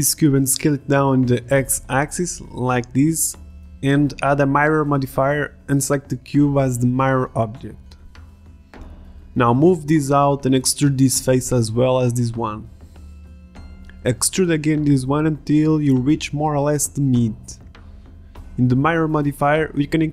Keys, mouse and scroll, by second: 0.2 click, 0.5 s, 1.5 s, 2.0-2.6 drag, 2.6 Tab, 3.0 s, 3.5 Tab, 3.6-8.3 drag, 8.6 Tab, 9.9-11.3 drag, 10.8 Tab, 11.4-13.1 drag, 11.9 e, 14.1 e, 15.4 ctrl+z, 15.4 e, 16.4 e.